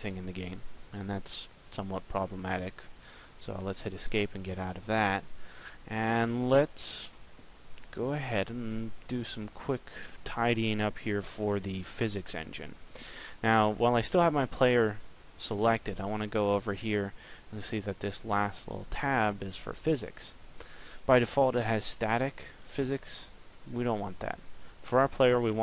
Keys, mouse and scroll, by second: 24.9 click.